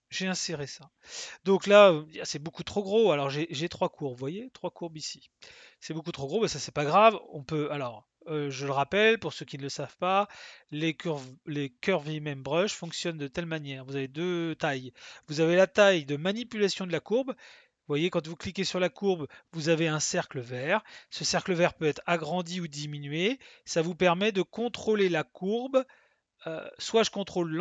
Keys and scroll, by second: 21.9 s.